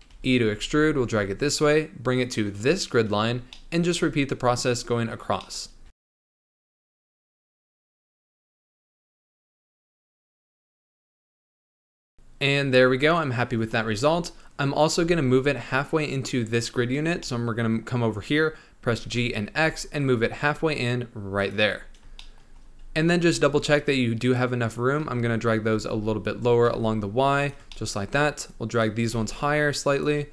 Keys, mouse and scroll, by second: 0.0 e, 3.5-5.8 shift+middle drag, 5.8 e, 6.6 shift+middle click, 6.7 e, 7.3 shift+middle click, 7.4 e, 8.6 shift+middle click, 8.9 g, 9.4 e, 10.1 scroll down 1, 10.2 shift+middle click, 10.3 e, 10.9 shift+middle click, 10.9 g, 12.7 Tab, 15.7-16.8 scroll up 1, 16.8-17.2 scroll up 3, 17.2-19.0 shift+middle drag, 19.0 g, 21.8-22.1 scroll down 3, 22.1-22.6 shift+middle drag, 22.6-23.3 scroll up 2, 23.3 Tab, 23.8 click, 25.1 g, 27.7 shift+middle click, 28.4 click, 29.1 g.